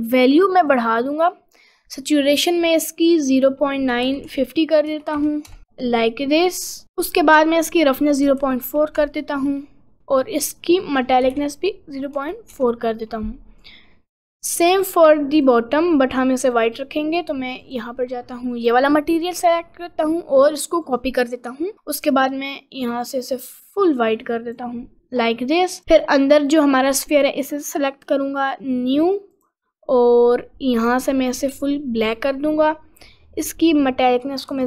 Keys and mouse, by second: 7.9-10.0 drag, 10.8-12.7 drag, 15.4 click, 17.8-18.9 drag, 21.0 click, 21.7 click, 29.3 click, 34.1-34.6 drag.